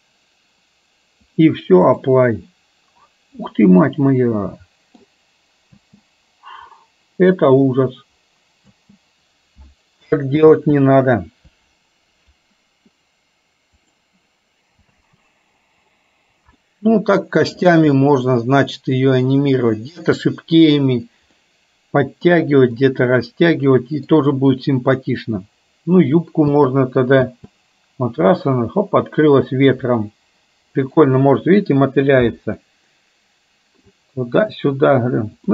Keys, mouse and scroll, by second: 1.5-2.3 drag, 3.5-5.1 middle drag, 5.9 space, 10.1 ctrl+space, 10.6 ctrl+z, 15.0 space, 16.8-17.9 middle drag, 18.1-19.1 middle drag, 21.5-22.4 middle drag, 23.0-24.4 middle drag, 26.5 space, 30.1-31.1 middle drag, 32.8-34.1 middle drag.